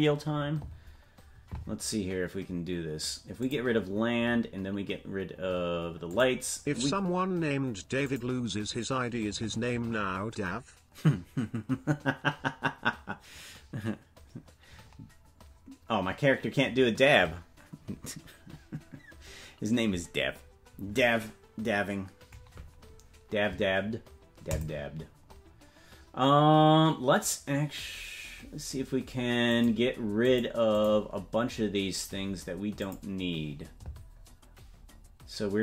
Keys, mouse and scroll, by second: 3.4-6.8 drag, 6.1-6.8 scroll up 10, 6.8-8.0 scroll down 1, 8.0 click, 8.0 scroll down 5, 29.5-34.1 drag, 29.5-30.2 scroll down 1, 32.8-34.1 scroll down 4, 34.1-35.6 scroll up 2.